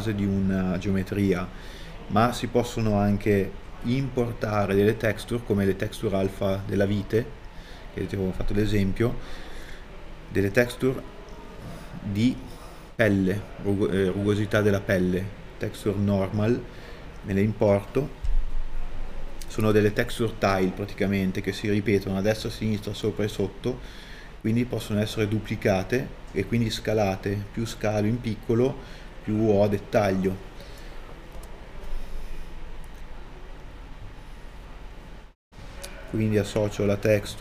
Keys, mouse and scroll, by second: 2.6-3.5 scroll down 1, 3.5 middle click, 6.3 a, 12.0-12.4 scroll up 1, 12.4 middle click, 16.5 middle click, 17.7 click, 35.3 a.